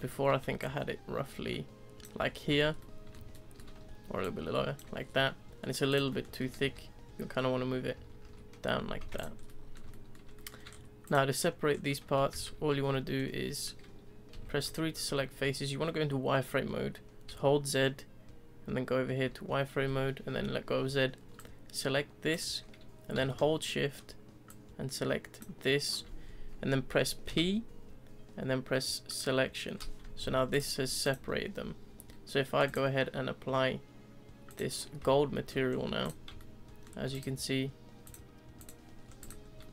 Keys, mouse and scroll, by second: 0.0-0.6 shift+middle drag, 0.6 ctrl+click, 2.1 z, 2.5 Tab, 2.7 scroll down 2, 2.8-3.7 middle drag, 3.7 Tab, 4.2 click, 4.8 Tab, 5.0 scroll down 1, 5.2-5.9 middle drag, 5.9 click, 6.1 middle click, 6.4 ctrl+z, 6.6 ctrl+z, 7.0 ctrl+z, 7.6 ctrl+z, 7.9 ctrl+z, 8.2 ctrl+z, 8.8 z, 9.0 Tab, 9.1 click, 9.4 scroll down 1, 9.4-10.4 middle drag, 10.4 scroll, 10.5 shift+middle drag, 10.7-11.0 scroll up 2, 11.0 click, 11.4-12.0 scroll up 4, 12.0 Tab, 12.3 z, 12.9-14.1 scroll down 3, 14.3 3, 14.6 click, 15.4 z, 17.3 z, 21.3 click, 24.5 shift+click, 27.3 p, 30.2 Tab, 30.5 click, 31.0 click, 32.6-35.0 drag, 35.0 z, 35.3-35.7 middle drag, 35.7 scroll down 2, 36.0 click, 36.4-37.1 shift+middle drag, 37.1 click, 38.0 click, 39.0 scroll down 3, 39.2 click, 39.6-39.7 middle drag.